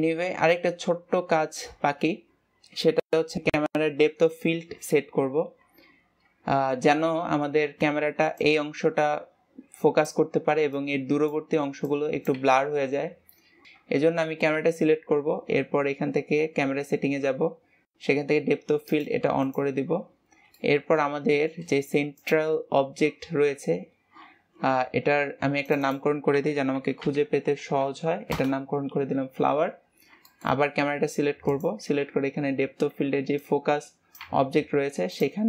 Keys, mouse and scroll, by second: 0.6 ctrl+s, 13.7 middle click, 14.0-14.3 scroll down 4, 19.2 click, 20.5-21.0 scroll up 3, 21.0 shift+middle click, 21.3-21.7 scroll up 3, 21.7 shift+middle click, 22.7 click, 26.2-29.8 drag, 30.1 scroll down 4, 30.6-31.2 shift+middle drag, 32.0 click.